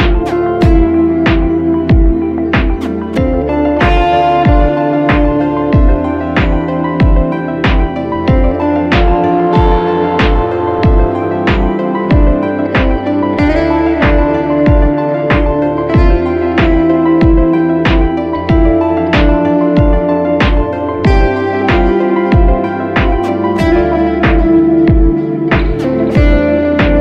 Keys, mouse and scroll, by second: 2.0 Up, 2.2 Up, 2.6 Up, 3.3 Up, 3.6 Up, 3.8 Up, 4.6 Left, 4.9 Left, 5.2 Left, 5.4 Left, 5.7 Left, 6.2 Down, 6.6 Down, 7.3 Return, 8.7 shift+click, 11.1 double click, 26.5 shift+click.